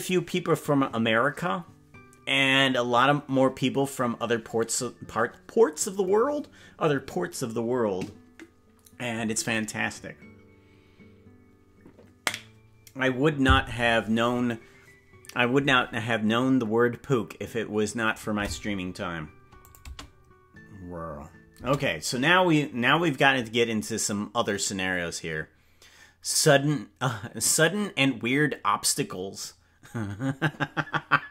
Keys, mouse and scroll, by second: 19.6 click, 19.8 space, 21.6 space, 22.2-23.2 scroll up 6.